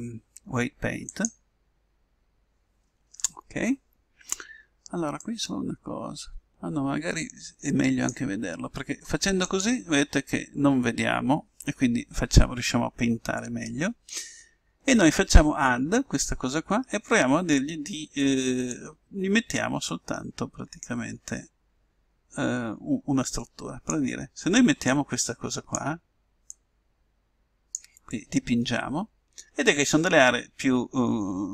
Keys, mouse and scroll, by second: 5.4-7.1 drag, 9.5-11.1 drag, 11.2 click, 18.7-20.6 drag, 24.9-29.9 drag.